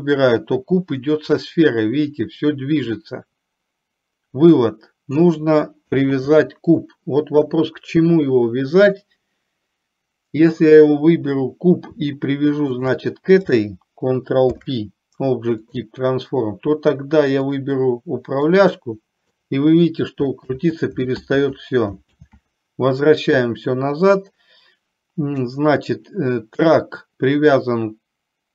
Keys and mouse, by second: 6.3 ctrl+z, 12.8 shift+click, 14.7 ctrl+p, 18.5-19.5 drag, 20.7 ctrl+z, 22.3 ctrl+z.